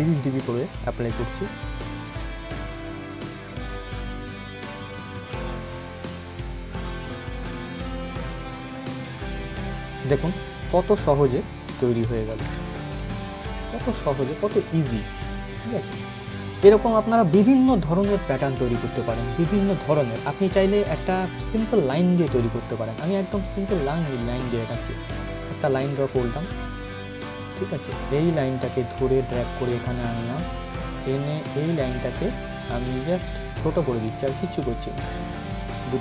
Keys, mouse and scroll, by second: 1.5-9.7 drag, 9.7 ctrl+g, 9.9 click, 11.1 alt+shift+click, 12.2 ctrl+z, 13.2-15.3 shift+drag, 15.5 scroll up 1, 17.9 click, 20.9 click, 22.5-22.9 scroll down 1, 23.2 scroll up 1, 24.2 click, 29.0 shift+right click, 29.4 click.